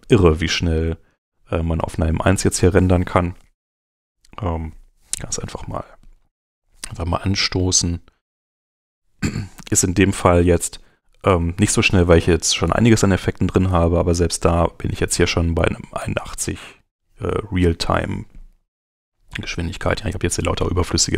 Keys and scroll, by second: 1.9 super+Tab.